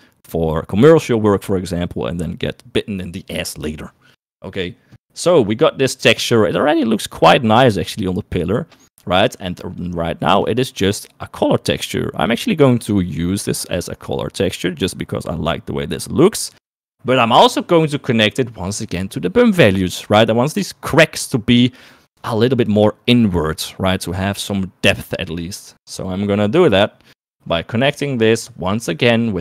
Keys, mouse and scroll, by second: 9.3 click, 10.2 click, 17.1 middle click, 28.1 middle click, 29.0 middle click.